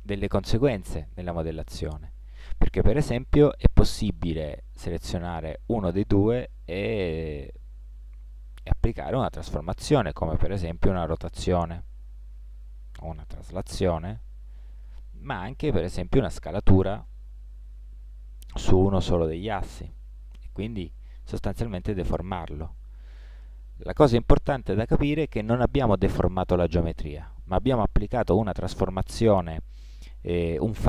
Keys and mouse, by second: 2.4 middle click, 4.2-8.7 right drag, 8.7 r, 13.3 g, 15.4-17.3 drag, 17.1 s, 20.0-21.9 drag, 21.9 middle click, 23.4-25.4 middle drag.